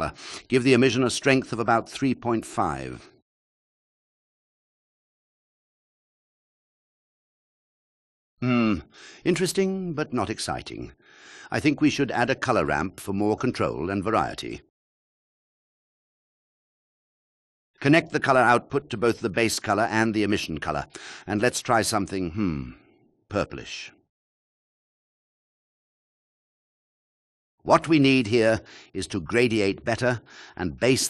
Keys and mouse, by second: 2.5-6.1 drag, 13.3 shift+a, 19.3 click, 24.9 click, 25.8-30.4 drag.